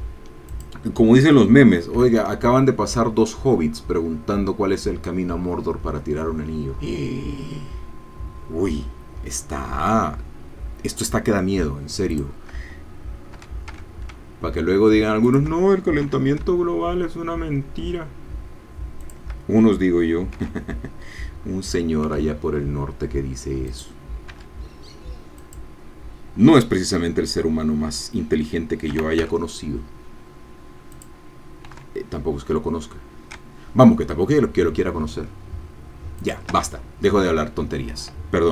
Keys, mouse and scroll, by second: 0.5 click, 2.1 e, 12.2 shift+click, 13.4 r, 13.7 x, 15.2 shift+click, 16.2 e, 19.0 shift+click, 20.4 r, 22.0 x, 23.7 click, 24.5 e, 25.4-28.9 drag, 28.9 r, 29.2 x, 30.9 click, 31.8 e, 36.2 shift+click.